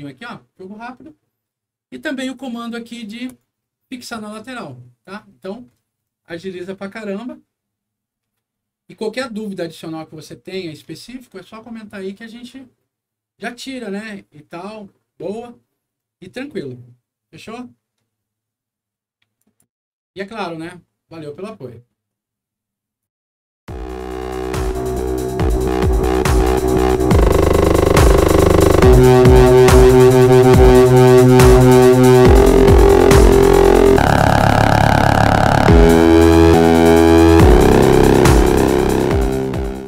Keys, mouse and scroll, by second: 3.2 click, 5.4-8.1 scroll down 6, 8.1-9.1 scroll up 4, 10.2-11.0 scroll down 2, 14.9-15.4 scroll up 1, 15.9-16.4 scroll down 2, 19.3 click.